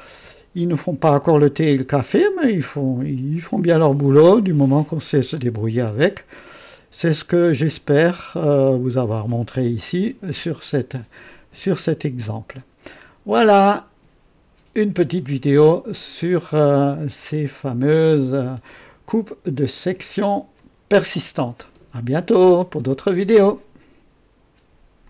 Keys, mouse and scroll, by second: 6.3 click, 7.5 right click, 18.0 click, 20.5 click, 23.7 right click, 25.0 click.